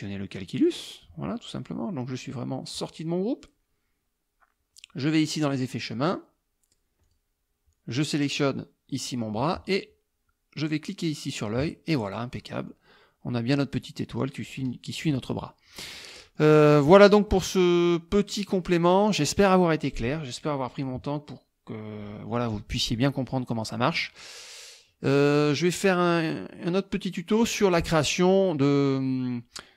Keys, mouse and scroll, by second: 0.7 click, 5.5 click, 7.1 click, 8.6 middle click, 11.4 click, 12.4 middle click, 15.1 KP_Subtract, 16.2 middle click, 17.3 middle click, 18.2 click, 23.4 middle click.